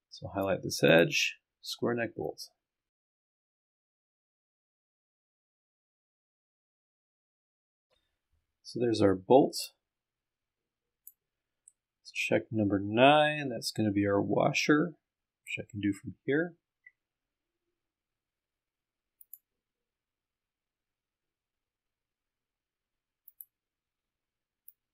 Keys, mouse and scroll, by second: 0.9 click, 3.0 click, 4.3 click, 9.6-11.3 drag, 11.6-15.6 middle drag, 16.4-18.5 scroll up 4, 18.5-18.9 scroll up 1, 19.2 click, 19.8-20.7 scroll down 1, 20.7-21.4 scroll down 1, 21.4 scroll down 1, 23.3 click, 24.7 click.